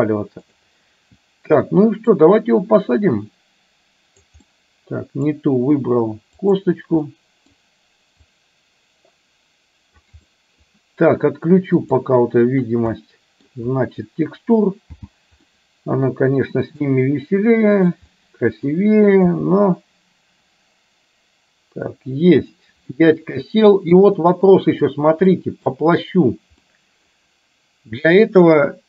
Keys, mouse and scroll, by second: 0.4 click, 2.2-4.4 drag, 4.7 middle click, 5.3 scroll down 1, 6.5 click, 7.2 middle click, 8.3-10.2 drag, 10.3 middle click, 11.9 click, 13.0-13.5 middle drag, 14.9 n, 15.7-16.8 middle drag, 18.2-18.7 middle drag, 19.4 g, 23.0-24.2 middle drag, 24.3-24.9 shift+middle drag, 25.3 scroll up 1, 25.4 middle click, 26.8-27.2 middle drag.